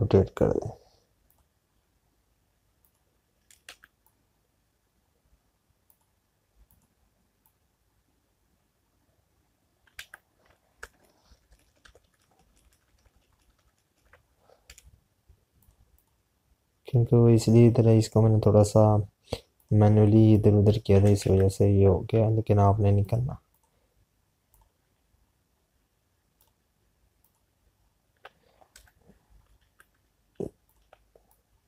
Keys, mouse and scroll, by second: 4.6 z, 7.9 click, 17.9 click, 20.6 click, 23.8 typing, 24.0 click, 30.5 z.